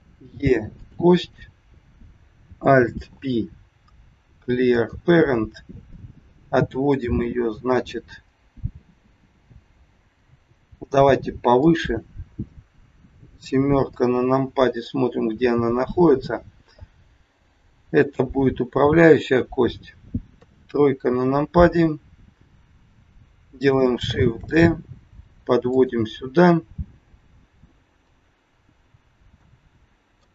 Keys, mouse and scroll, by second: 1.1 click, 3.0 alt+p, 8.1-8.5 scroll down 3, 10.1 g, 13.8 KP_7, 17.7 g, 20.2 KP_3, 21.6 click, 24.2 shift+d, 26.4 scroll up 2, 27.6-28.1 scroll down 3, 29.3 shift+middle click.